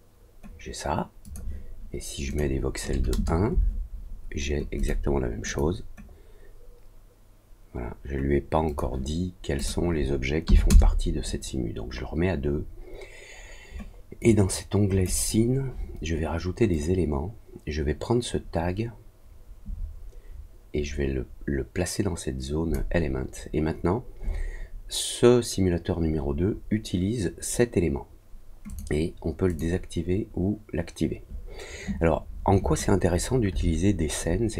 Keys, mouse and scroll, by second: 1.2 click, 2.2 click, 4.7 click, 5.4 click, 8.6 click, 9.5 click, 14.1 click, 16.7-22.7 drag, 28.6 click, 29.4 click.